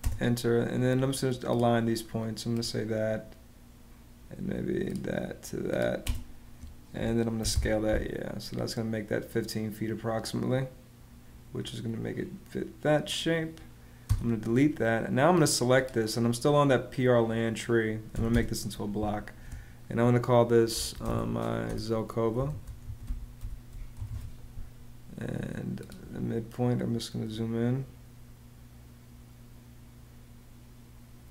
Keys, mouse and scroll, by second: 5.7 space, 7.1 y, 7.2 Page_Up, 13.8 BackSpace, 17.8 b, 18.0 space, 20.8-24.3 typing.